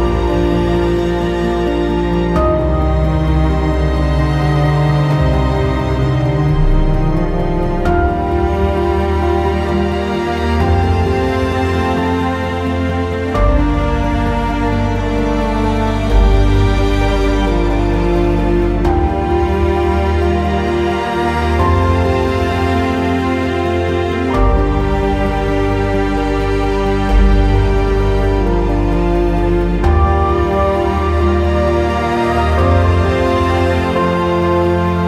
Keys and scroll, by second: 4.0 r, 18.1 q, 20.5 w, 30.4 q, 31.5 w.